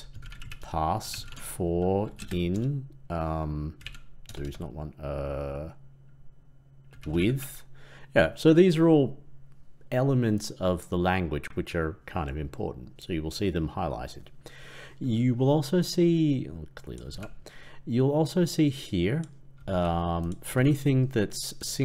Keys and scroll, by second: 17.0 ctrl+x, 19.6 ctrl+c, 20.5 ctrl+v.